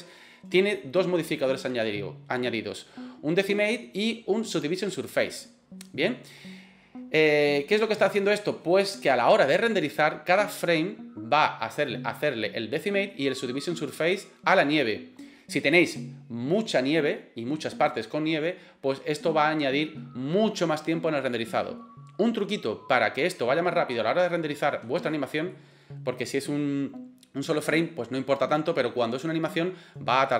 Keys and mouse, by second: 25.1-25.5 middle drag.